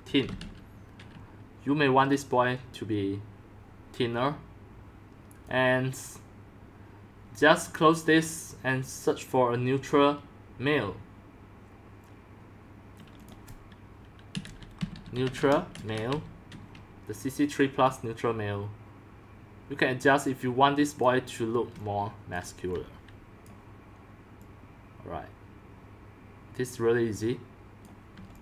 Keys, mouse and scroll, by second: 0.0-0.9 typing, 5.4-8.6 drag, 11.4-13.0 drag, 13.2-14.8 drag, 14.0-16.6 typing, 17.8-18.4 drag, 19.4 typing, 21.0-23.1 drag, 21.7 c, 22.2 c, 22.3 c, 22.7 c, 23.5-26.6 drag, 28.0 click, 28.1-28.4 typing.